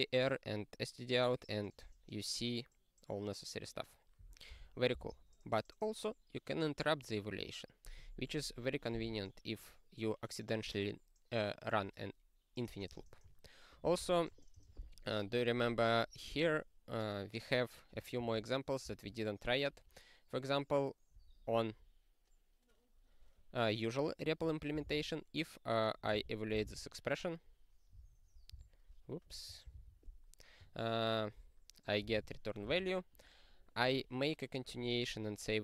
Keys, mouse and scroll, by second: 5.0 ctrl+b, 13.8 ctrl+n, 14.0 ctrl+n, 16.4 click, 18.1 ctrl+a, 18.8 ctrl+n, 26.6 ctrl+e, 28.4 click, 28.5 q, 29.3 click, 29.7 ctrl+e, 32.0 ctrl+n, 32.1 ctrl+n, 32.7 ctrl+e.